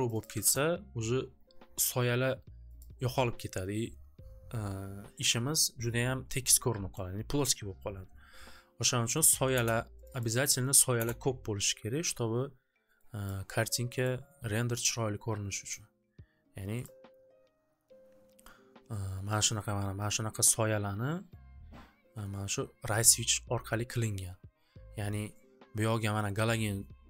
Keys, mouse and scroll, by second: 0.0 click, 0.2 click, 0.4 Return, 2.7 Return, 2.7 click, 4.8 3, 9.0 click, 9.2 click, 9.3 1, 9.5 Return, 10.0 click, 10.2 click, 10.6 click, 10.7 click, 10.7 1, 10.9 Return, 13.2 click, 14.0 right click, 15.7 click, 16.8 click, 23.0 click, 25.2-27.0 drag.